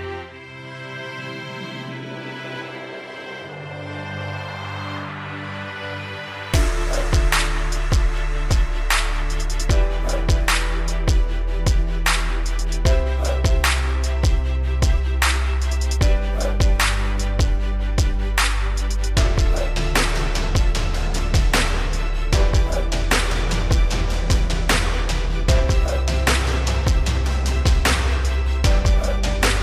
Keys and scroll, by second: 0.6 ctrl+j, 6.4 ctrl+g.